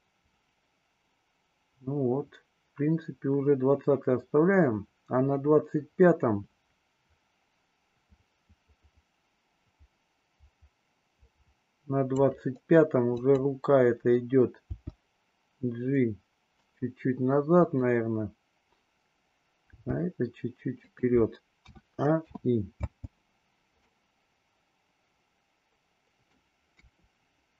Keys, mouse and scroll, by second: 13.1 click, 14.6 g, 17.6 click, 19.7 g, 21.6 a, 22.2 i, 22.7 space, 23.9-26.5 middle drag, 26.7 KP_2.